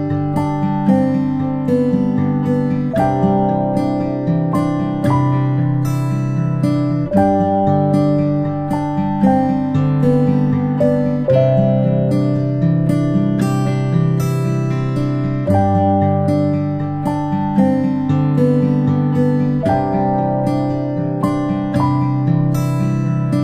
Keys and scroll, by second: 0.0-0.8 typing, 1.9 ctrl+p, 7.1 i, 11.1-11.5 space, 13.2 space, 13.4-14.0 space, 17.1 p.